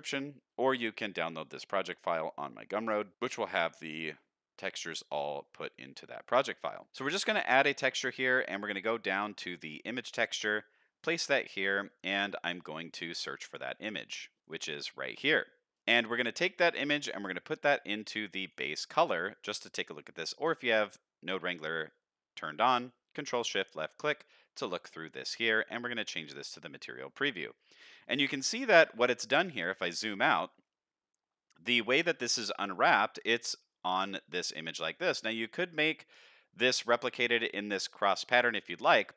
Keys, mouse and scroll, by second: 3.0 middle click, 5.1 middle click, 5.5-5.9 scroll up 1, 5.9 middle click, 6.3-6.7 scroll up 1, 6.7 click, 6.9 shift+a, 10.7-11.5 scroll up 3, 11.2 middle click, 13.4 click, 15.8 middle click, 16.1-17.0 scroll down 1, 17.0-18.5 drag, 18.8 middle click, 19.3 click, 20.0 middle click, 23.2 ctrl+shift+click, 25.3 z, 27.1 middle click, 28.0 shift+middle click, 28.5 middle click, 29.1-31.0 scroll down 6, 30.1-31.0 scroll up 1, 31.0-31.5 scroll up 1.